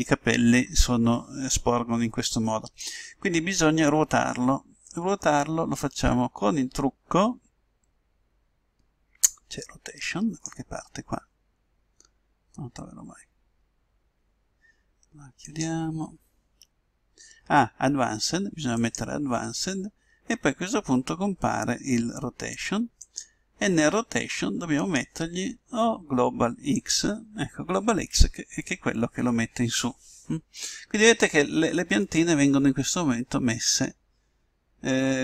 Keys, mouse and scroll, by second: 5.7-7.6 drag, 13.5-17.1 middle drag, 15.5-17.3 drag, 18.8-20.5 drag, 23.1-24.7 drag, 24.9-26.6 drag, 32.1-34.5 middle drag.